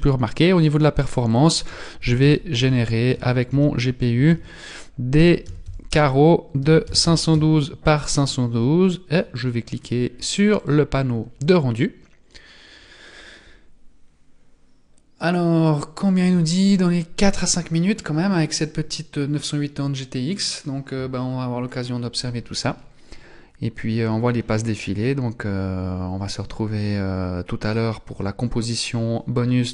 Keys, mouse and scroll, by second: 0.3-1.3 scroll down 8, 1.3 click, 8.2-10.6 scroll up 23, 10.6 click, 10.6 scroll up 3.